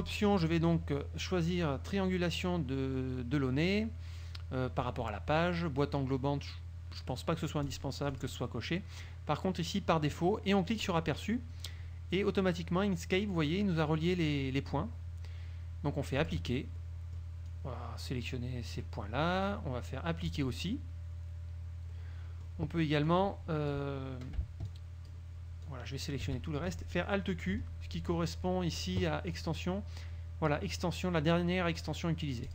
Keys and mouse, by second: 7.8 click, 8.3 click, 11.0 click, 16.4 click, 17.0 click, 17.6-19.1 drag, 20.4 click, 22.1 click, 23.2 click, 24.8 shift+click, 25.8 shift+click, 29.5 click.